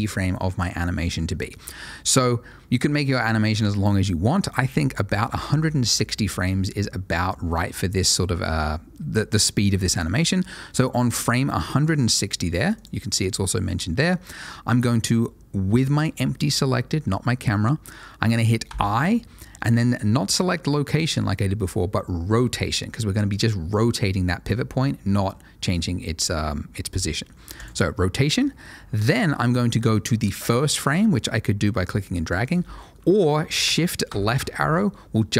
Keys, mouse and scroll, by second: 4.5 click, 12.7 click, 18.6 i, 27.5 click, 31.0 click, 34.0 shift+Left.